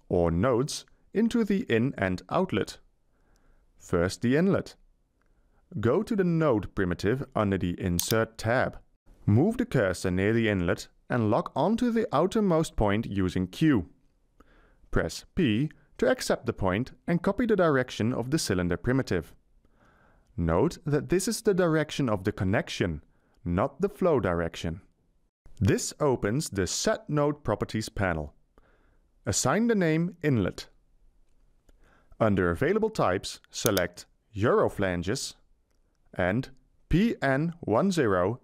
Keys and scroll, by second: 13.8 q, 15.7 p.